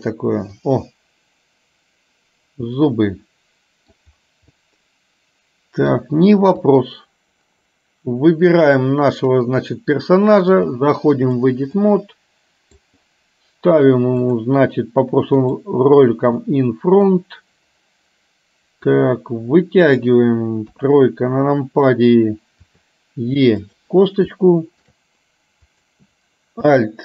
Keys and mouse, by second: 0.1 click, 0.6-4.0 middle drag, 4.8-6.0 middle drag, 6.8 click, 9.1 click, 10.8 click, 11.9 middle click, 14.4 click, 15.5 click, 17.1-19.0 middle drag, 19.9 click, 20.8 KP_3, 22.8 e, 24.4 shift+middle click, 25.8 click.